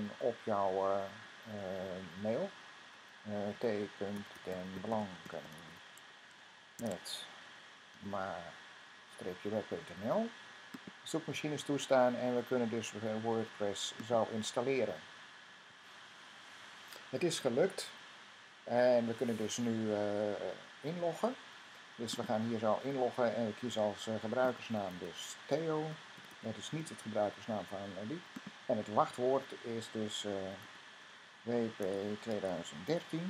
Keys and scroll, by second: 0.0 typing, 2.8-8.4 typing, 24.0-26.6 typing.